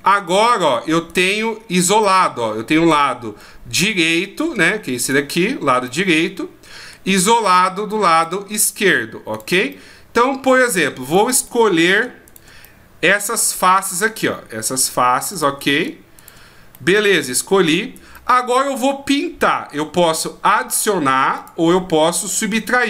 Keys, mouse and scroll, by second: 0.3 right click, 1.1 right click, 2.0 middle click, 2.9 right click, 3.4 middle click, 4.2 middle click, 5.0 right click, 5.8 middle click, 7.4 right click, 8.1 right click, 8.6 right click, 9.3 right click, 9.7 middle click, 11.0 right click, 11.4 middle click, 12.2 shift+right click, 12.6 middle click, 13.8 shift+right click, 14.1 middle click, 15.3 shift+right click, 16.7 shift+right click, 16.7 middle click, 18.1 middle click, 21.3 click.